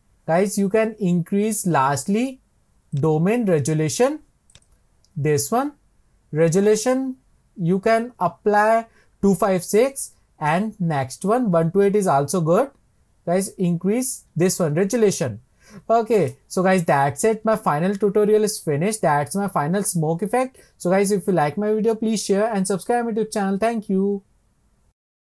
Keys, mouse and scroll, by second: 3.0 Left, 4.7 click.